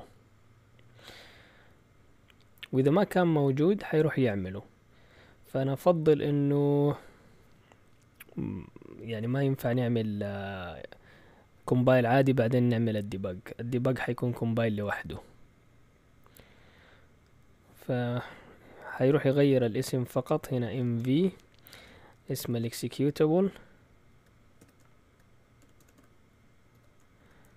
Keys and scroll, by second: 20.4-21.1 typing, 22.4 typing, 24.6-27.5 typing.